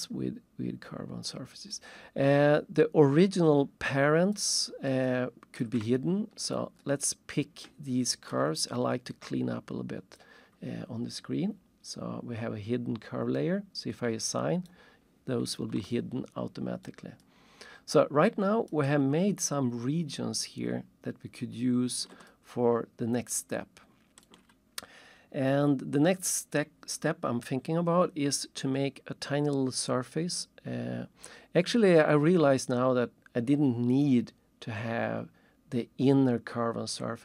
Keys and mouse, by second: 2.6 alt+shift+click, 4.6 alt+shift+middle click, 5.1 alt+shift+click, 6.0 ctrl+shift+click, 6.8 ctrl+shift+click, 10.2 click, 13.3 right click, 14.6 right click, 16.0 alt+shift+middle click, 17.2 alt+shift+click, 22.3 alt+shift+click.